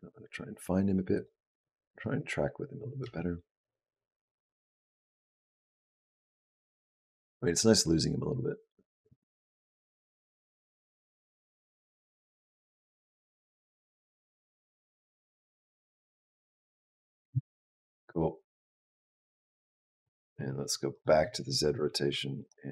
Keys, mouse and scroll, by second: 1.8 click, 2.8 space, 17.0 space, 17.9 click, 20.7 click, 21.9 b, 22.5 g.